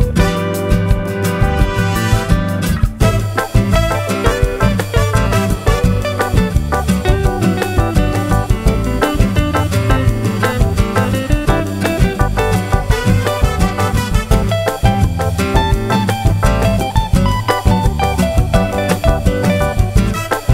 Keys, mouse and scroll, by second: 0.4 shift+click, 2.9 shift+click, 4.2-5.2 shift+drag, 5.7 shift+click, 6.1-7.4 shift+drag, 7.7-8.9 shift+drag, 8.9 shift+click, 10.0-11.6 shift+drag, 12.1 shift+click, 13.0-14.6 shift+drag, 14.9-18.0 shift+drag, 18.8 shift+click, 19.2 shift+click, 19.6 shift+click, 20.0 shift+click.